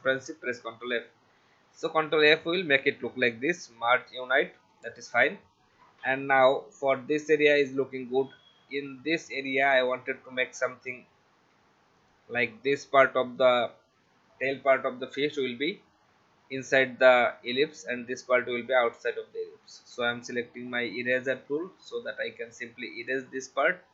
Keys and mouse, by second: 0.0 ctrl+f, 3.5 click, 7.4 click, 12.0 click, 19.6 shift+e, 21.6 click, 23.0 click, 23.7 v.